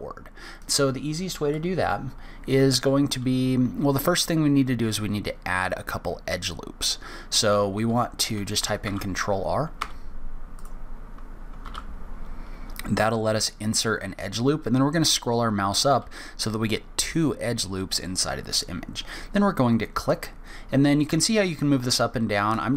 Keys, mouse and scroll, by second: 10.6 click, 11.6 ctrl+r.